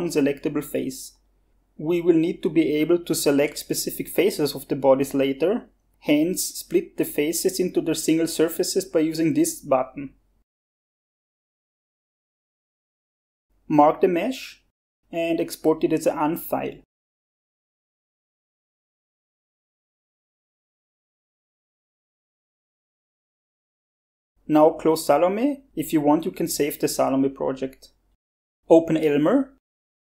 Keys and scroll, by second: 29.6-30.0 typing.